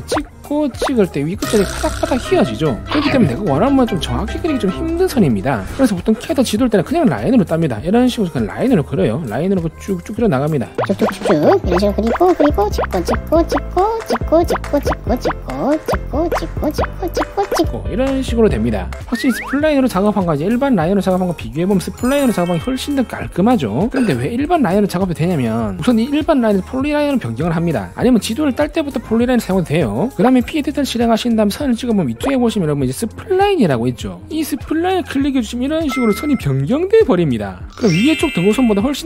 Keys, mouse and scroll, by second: 0.3 click, 1.2 click, 4.1 click, 4.7 click, 5.2 click, 7.7 middle click, 8.7 click, 9.5 click, 10.3 click, 10.9 click, 11.2 click, 11.6 click, 12.0 click, 12.4 click, 12.7 click, 13.1 click, 13.4 click, 13.6 middle click, 14.2 click, 14.6 click, 14.9 click, 15.3 click, 16.0 click, 16.5 click, 16.8 click, 17.2 click, 17.7 click, 17.9 right click, 20.1 click, 21.4 click, 22.8 click, 24.7 click, 27.4 click, 32.0 click, 35.8 click, 38.8 click.